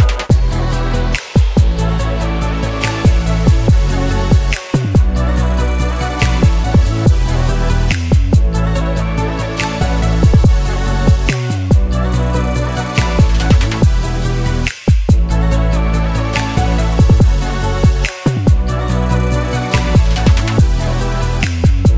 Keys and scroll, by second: 14.6 0, 15.0 shift+5, 15.3 shift+Return, 16.2 Return.